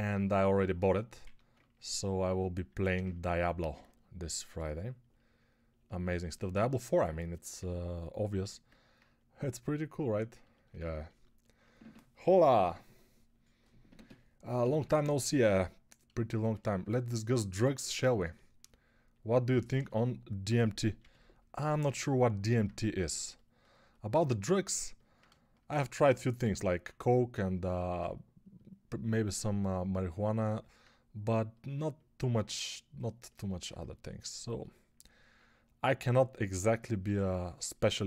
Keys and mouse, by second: 0.0 2, 1.1 1, 8.3 g, 20.8 g.